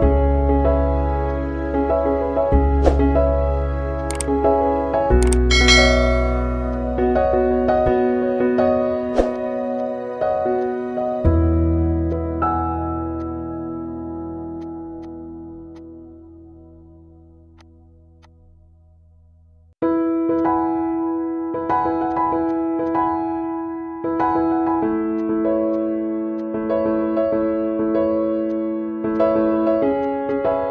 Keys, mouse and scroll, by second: 6.9 right click, 7.7 click, 10.2 space, 11.3 ctrl+d, 12.0 space, 12.1 click, 12.2 space, 12.8 click, 12.9 space, 15.0 click, 15.1 space, 16.2 click, 18.2 click, 19.9 space, 19.9 click, 20.1 space, 20.5-30.7 drag.